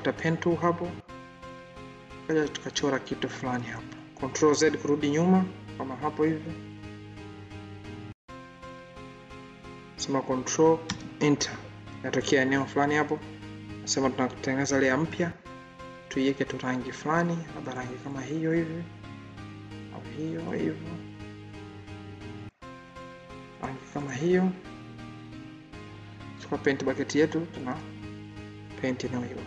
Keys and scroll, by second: 3.2 ctrl+z, 10.7 ctrl+Return, 28.9 ctrl+d.